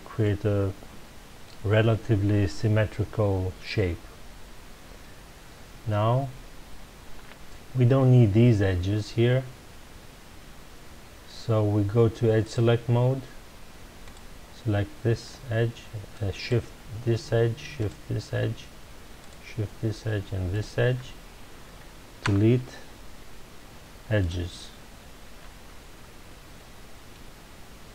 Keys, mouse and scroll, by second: 0.2-3.2 middle drag, 12.4 click, 14.0 click, 16.1 shift+click, 17.8 shift+click, 19.2 shift+click, 20.5 shift+click, 22.2 Delete, 26.0-26.5 scroll down 1, 26.5-27.9 middle drag.